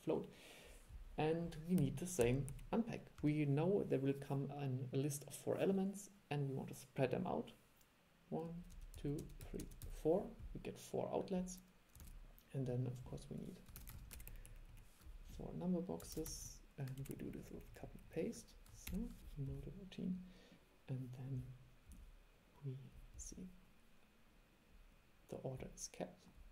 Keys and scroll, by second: 12.1 super+3, 14.0 super+c, 14.1 super+v, 16.3 super+c, 16.5 super+v.